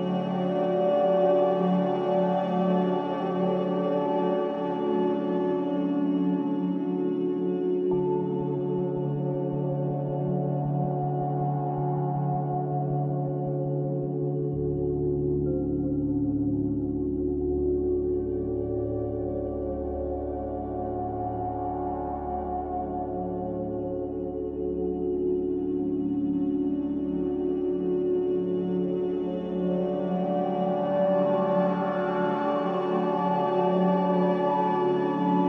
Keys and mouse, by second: 1.3-2.7 drag, 2.7 middle click, 4.8 click, 5.5 middle click, 8.0 shift+middle click, 11.3 alt+z, 13.3 middle click, 14.2 alt+z, 15.7 m, 18.0-21.2 middle drag, 23.1 click, 23.9 g, 28.9 g, 31.4 shift+click, 33.1 g, 34.9 middle click.